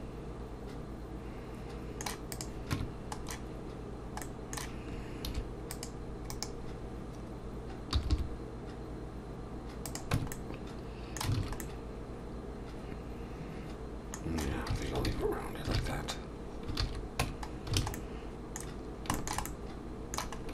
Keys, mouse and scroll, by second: 2.3 click, 2.7 Tab, 4.2 middle click, 5.3 ctrl+r, 7.9 g, 10.1 Tab, 10.3 middle click, 11.4 alt+a, 11.6 middle click, 15.2 ctrl+z, 17.2 Tab, 17.5 scroll down 2, 17.8 alt+a, 17.9 middle click, 18.7-19.1 scroll down 3, 19.1 shift+middle click, 19.5 middle click, 20.4 scroll up 1.